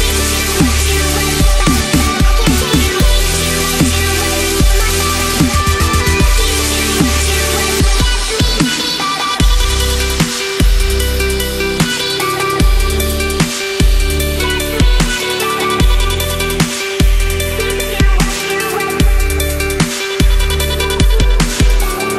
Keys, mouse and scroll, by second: 0.5 click, 0.8 ctrl+a, 1.5 ctrl+c, 1.5 click, 4.9 ctrl+v, 5.5 click, 7.8 F9, 9.4 click, 10.1 ctrl+a, 12.1 click, 12.4 Left, 15.4 click, 15.8 ctrl+=, 16.4 space, 16.5 click, 16.7 space, 17.6 click, 17.9 Left, 19.5 click, 21.8-22.1 drag.